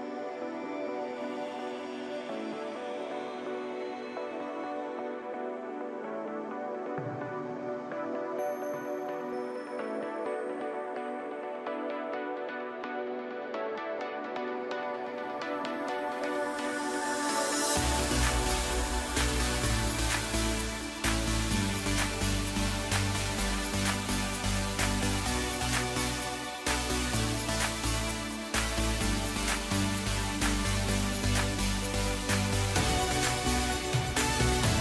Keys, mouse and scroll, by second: 5.4-8.4 drag, 8.4-9.3 scroll down 7, 9.3-12.8 middle drag, 12.8-15.9 drag, 16.2-17.2 middle drag, 17.2 scroll up 1, 17.4-18.2 middle drag, 18.2-18.9 scroll up 2, 18.9-21.0 middle drag, 21.0 click, 21.6-22.0 scroll down 2, 22.0-25.0 middle drag, 25.0-25.4 scroll up 6, 25.6-26.2 middle drag, 26.2-26.7 scroll up 2, 27.1 drag, 28.0 Tab, 29.1 KP_Decimal, 30.1 KP_1, 30.8 s.